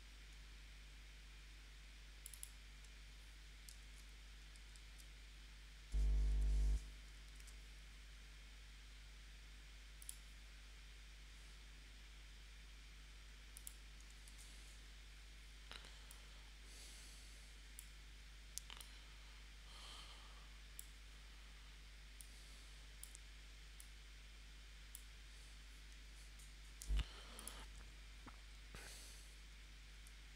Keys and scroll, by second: 3.8 super+z, 4.8 super+z, 6.3 p, 7.4 super+z, 14.3 shift+c, 27.5 v, 30.0 a.